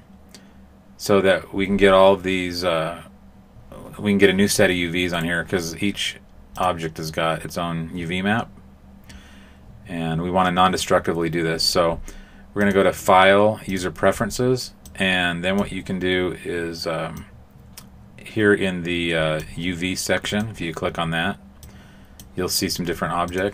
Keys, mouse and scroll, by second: 5.1 right click, 6.5 click, 12.6 click.